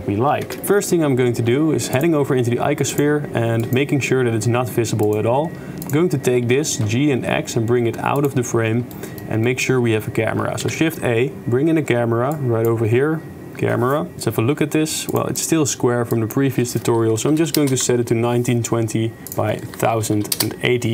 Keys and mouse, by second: 0.5 shift+space, 0.6 click, 2.9 click, 3.6 click, 6.6 g, 9.0-9.3 shift+middle drag, 9.7 shift+middle click, 10.6 shift+a, 14.1 ctrl+alt+KP_0, 15.1 click, 16.1-17.8 drag, 17.8 1, 17.9 0, 19.5-20.6 drag.